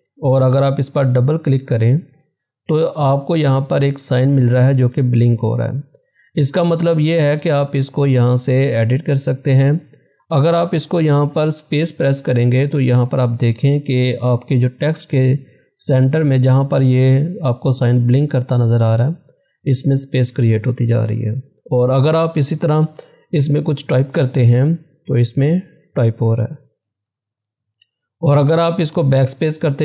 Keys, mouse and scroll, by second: 3.5 click, 12.1 space, 21.1 BackSpace, 23.3-24.1 typing, 26.7 BackSpace.